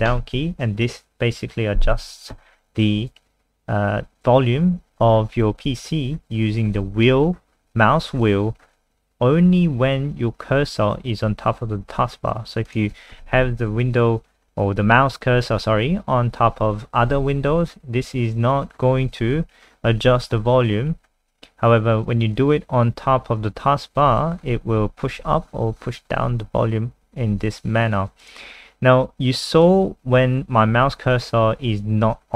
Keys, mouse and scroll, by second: 4.0-5.1 scroll up 1, 5.1 scroll up 1, 5.7-6.3 scroll up 3, 6.3-8.0 scroll down 9, 8.0-9.7 scroll up 3, 10.1-10.8 scroll up 1, 12.7 click, 17.4-17.9 scroll up 3, 17.9-18.5 scroll down 2, 18.6-18.9 scroll up 4, 19.6-20.5 scroll up 7, 20.5 scroll down 2, 20.8-22.1 scroll up 5, 24.0-25.5 scroll up 10, 25.5-27.1 scroll down 8, 27.2-28.2 scroll up 2, 28.2 click.